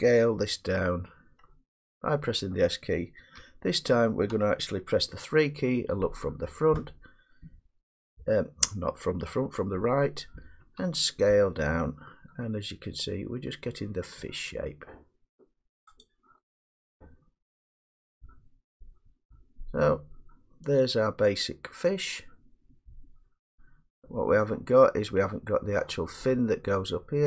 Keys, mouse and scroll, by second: 2.0 middle click, 3.4 1, 4.3 3, 7.0 middle click, 10.6 s, 16.1-18.3 drag, 19.1 click, 19.4 click, 19.8-21.2 drag, 25.8-27.2 middle drag.